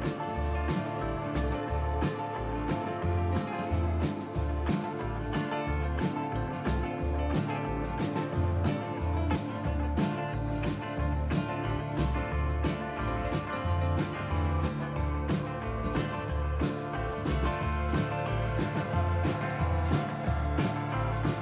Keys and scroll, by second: 1.0 t, 3.1 alt+s, 4.3 alt+x, 5.7 t, 10.1 c, 17.5 f.